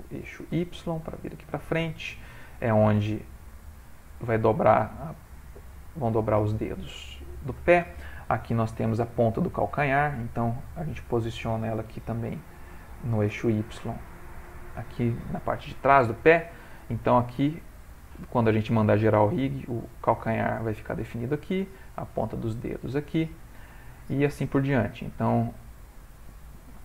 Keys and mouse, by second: 2.1 click, 2.5 g, 8.4 click, 10.1 g, 15.2 ctrl+middle click, 17.3 click, 21.4 click, 22.3 shift+middle click, 22.5 shift+middle click, 22.9 middle click, 23.8 shift+middle click, 24.0 shift+middle click, 25.6 click, 26.4 ctrl+middle click.